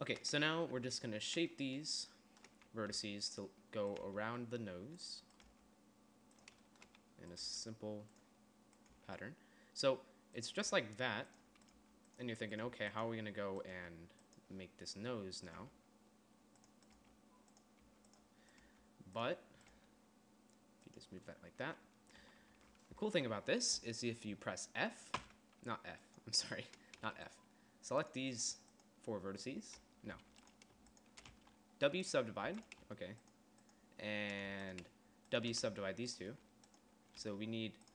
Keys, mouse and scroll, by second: 0.9 Tab, 1.3 Tab, 3.4 g, 4.6 g, 6.0 g, 8.0 g, 9.5 g, 10.7 click, 11.3 g, 12.3 g, 13.2 g, 14.2 click, 14.3 g, 16.2 g, 17.5 g, 18.4 g, 19.2 g, 20.3 g, 22.8 a, 23.1 a, 25.7 f, 30.7 a, 31.8 w, 33.0 a, 35.0 a, 36.2 w, 37.8 g.